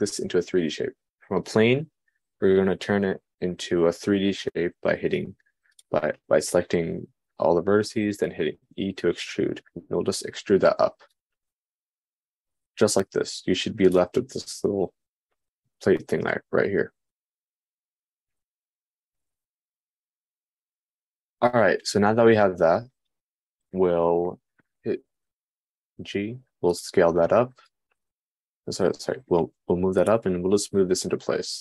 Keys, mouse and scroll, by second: 11.6 Tab, 14.5-16.3 middle drag, 16.3-27.8 shift+drag, 16.3-27.8 shift+right drag, 26.4 g, 29.9 g.